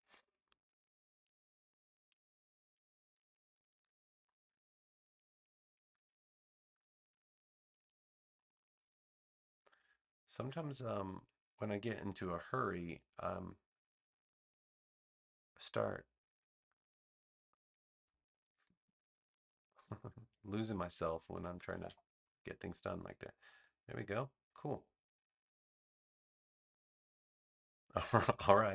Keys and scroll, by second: 3.7 v, 6.9 Escape, 18.6 super+-, 19.9 super+=, 21.4 alt+=.